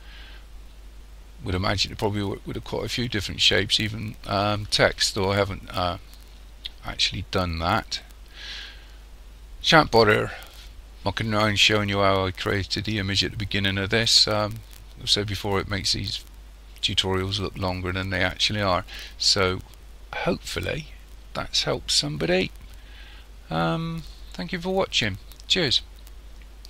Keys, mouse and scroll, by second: 6.9 scroll down 1, 8.0 middle click, 18.1 middle click.